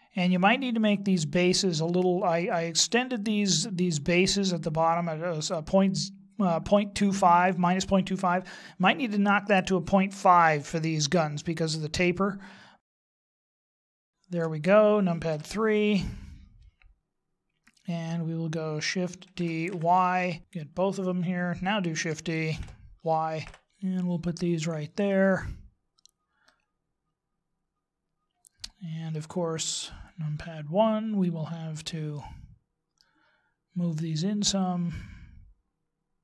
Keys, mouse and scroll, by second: 0.0 middle click, 12.9-13.6 scroll down 6, 13.5 middle click, 14.0 shift+middle click, 15.3 KP_3, 16.0 scroll down 3, 19.2 shift+d, 20.4 ctrl+z, 20.5 shift+right click, 22.5 shift+d, 26.4 middle click, 29.5 KP_1, 32.1 middle click, 34.5 click.